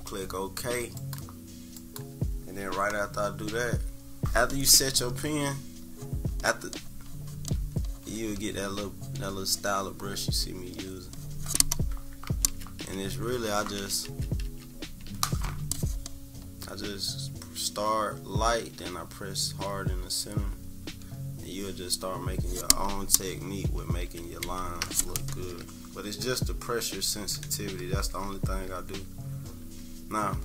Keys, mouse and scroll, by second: 1.0 click, 1.8 click, 5.2 click, 5.9 click, 6.7 click, 7.6 click, 8.4 click, 9.2 click, 10.8 click, 12.5 ctrl+z, 13.1-14.8 typing, 16.4-23.6 drag, 24.1 ctrl+z, 24.5 ctrl+z, 26.4 ctrl+-, 27.0-28.1 typing, 27.3 scroll down 1, 27.8 scroll down 1, 28.4 scroll up 1, 29.0 scroll down 1, 29.6 =, 30.1 scroll up 2.